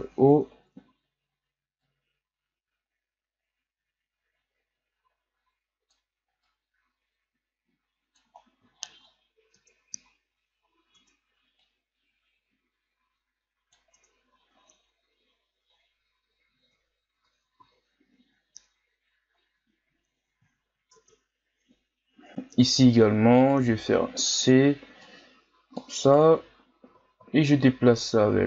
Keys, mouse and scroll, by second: 0.2 ctrl+z, 0.6-1.8 scroll up 4, 1.8-8.7 drag, 8.7-9.1 shift+scroll up 5, 9.1-9.5 scroll down 2, 9.5 Tab, 10.1-10.7 scroll down 1, 10.7 scroll up 1, 11.0 Tab, 11.5-13.9 drag, 13.9 Tab, 14.4-15.8 scroll down 2, 15.8-16.7 scroll down 2, 16.7 Tab, 17.2 Tab, 17.6 a, 19.3-20.6 scroll up 5, 20.6-20.9 shift+scroll up 5, 20.9 Tab, 22.5 z, 23.4 right click, 23.6 c, 26.9 z, 27.3-27.9 shift+scroll up 2, 27.9-28.4 drag.